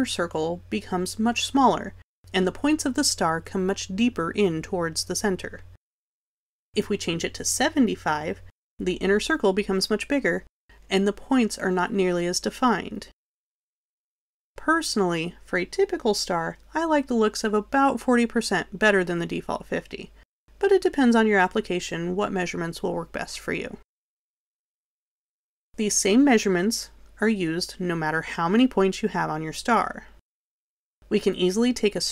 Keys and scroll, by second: 8.3 7, 17.6-18.4 typing.